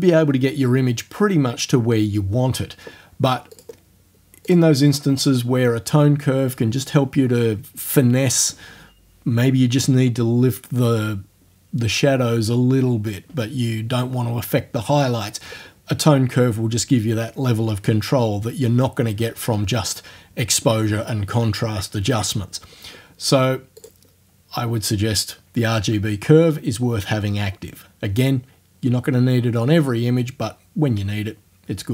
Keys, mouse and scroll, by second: 3.6 click, 4.5 click, 23.8 click.